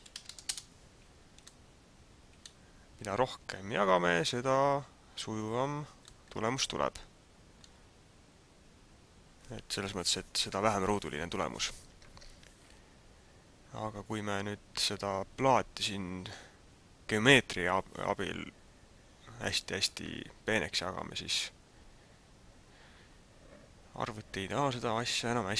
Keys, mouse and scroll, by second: 1.5 middle click, 4.0-4.6 scroll up 3, 6.2 middle click.